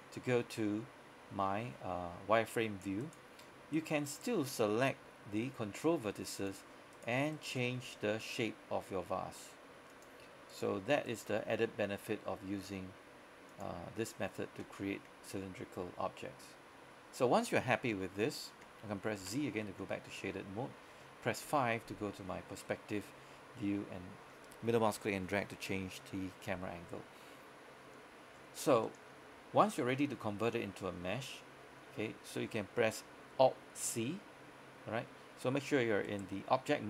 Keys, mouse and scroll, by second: 0.0 scroll up 1, 3.1 right click, 5.5 g, 6.4 click, 7.0 right click, 7.4 shift+right click, 7.8 g, 10.0 click, 10.6 right click, 11.2 shift+right click, 11.5 g, 13.6 click, 19.3 z, 21.5 KP_5, 22.3-23.0 scroll down 1, 23.7 middle click, 28.1 scroll up 1, 28.4-28.7 scroll down 1, 28.8 middle click, 29.3-30.1 scroll up 1, 30.1 middle click, 31.0 scroll down 1, 31.3 middle click, 36.1 right click.